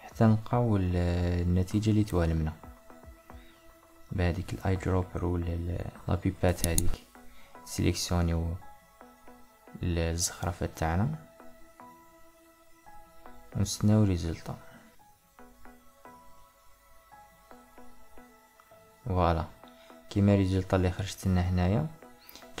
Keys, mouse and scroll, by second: 1.4 click, 2.2 click, 3.8-7.0 drag, 8.4 click, 9.2 click, 10.6 click, 18.9-22.6 middle drag.